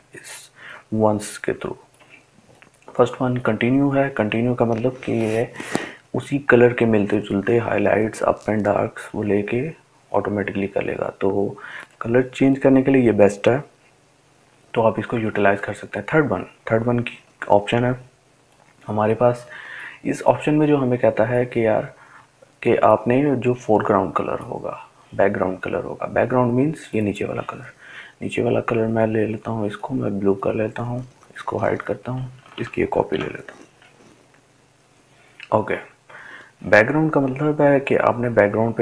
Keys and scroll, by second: 34.8 ctrl+j.